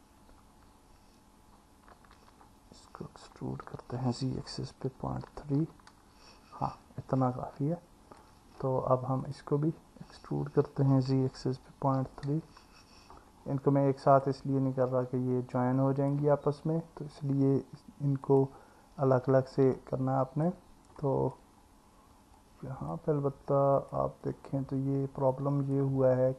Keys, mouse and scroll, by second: 2.2 ctrl+z, 3.7 e, 4.2 z, 5.0 KP_Decimal, 5.6 KP_3, 7.4 alt+middle click, 10.8 e, 11.1 z, 11.7 KP_Decimal, 12.0 KP_3, 15.6 click, 18.3 click, 19.8 alt+middle click, 21.0 alt+middle click, 22.4 alt+middle click, 23.9 click, 25.4 click.